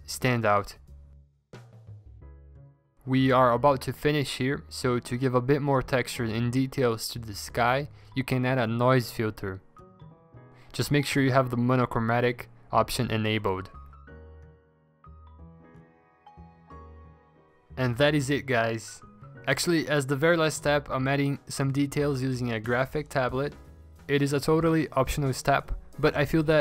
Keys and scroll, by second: 4.2-5.1 scroll, 5.1-5.8 scroll, 5.8 ctrl+j, 16.7 v, 18.1-19.3 typing, 21.4 ctrl+z, 23.3 e, 23.9 b, 26.0 ctrl+z, 26.0 b.